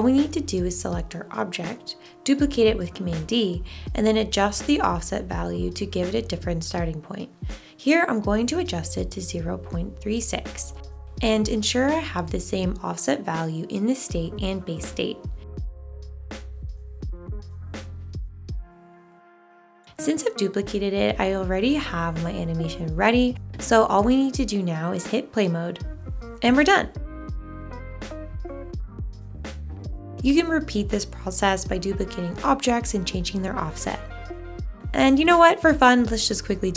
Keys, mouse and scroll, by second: 2.5 super+d, 13.2 super+c, 16.4 super+v.